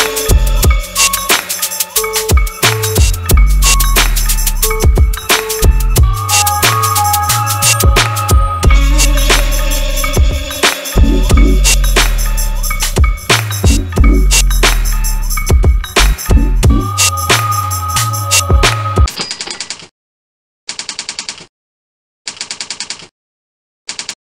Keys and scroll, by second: 4.4 F4, 5.2 F9.